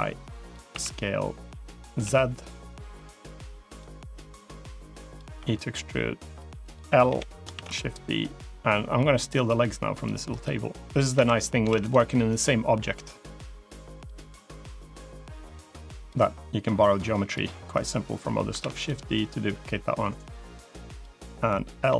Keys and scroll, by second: 0.6 s, 5.2 e, 6.9 l, 7.4 shift+d, 11.0 l, 11.5 shift+d, 18.5 shift+d, 21.7 l.